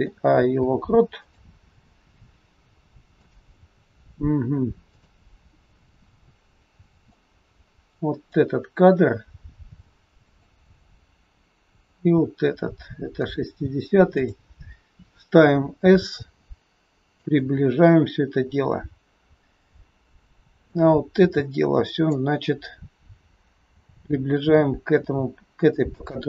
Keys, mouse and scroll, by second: 0.4 i, 3.3 click, 4.9 click, 7.1 click, 10.3 click, 11.8 click, 14.2 click, 15.6 s, 18.5-19.5 scroll down 7, 19.5-19.8 scroll down 4, 20.6 click, 20.6-21.3 scroll down 2, 23.9 g.